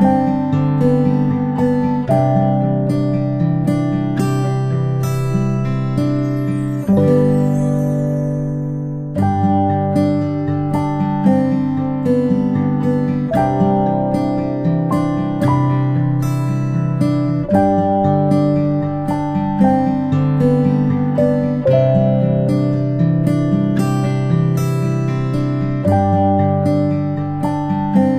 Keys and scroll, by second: 20.9-21.3 ctrl+space, 22.0 p.